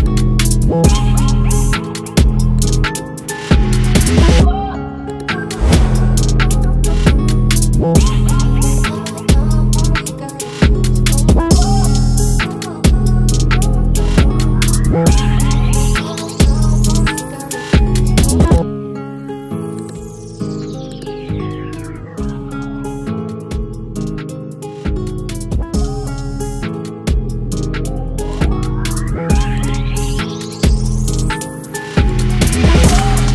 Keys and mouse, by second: 19.7 click.